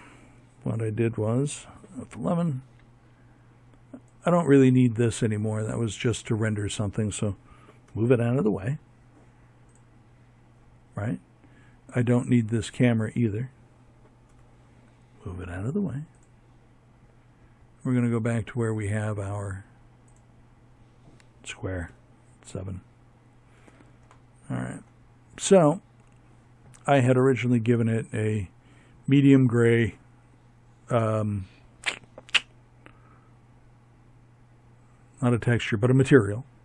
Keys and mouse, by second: 5.8 m, 9.9-12.2 right drag, 12.2 m, 15.9-18.0 drag, 18.0-19.8 right drag, 19.8 KP_7, 25.3-27.6 drag, 35.6-36.6 drag.